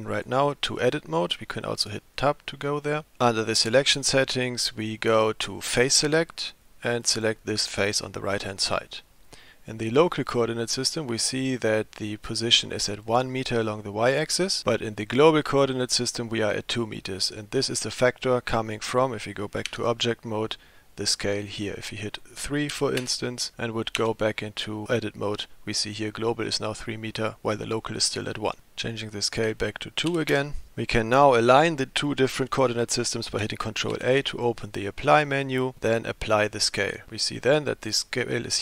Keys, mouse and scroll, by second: 0.2-2.0 drag, 3.0 middle click, 5.7 click, 7.0 click, 15.1 click, 19.7 Tab, 21.8-23.5 drag, 24.0 Tab, 27.2 click, 29.3-30.7 drag, 33.9 ctrl+a.